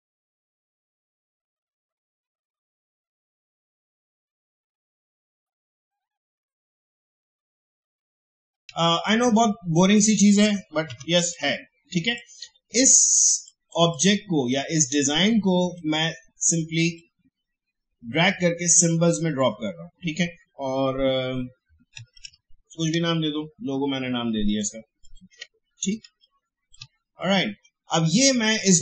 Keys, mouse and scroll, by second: 0.5 ctrl+d, 1.1 click, 1.8 ctrl+g, 1.9 click, 2.5 space, 2.6-5.8 drag, 5.6 space, 5.8 space, 6.0 click, 8.5 alt+scroll down 2, 8.6 space, 8.8-10.9 drag, 10.9 ctrl+g, 11.2 click, 13.3 space, 13.5-21.2 drag, 21.7-22.8 typing, 22.9 Return, 24.4 click, 25.3 Delete, 26.0 space, 26.2 click, 26.5 space, 27.2-28.8 drag.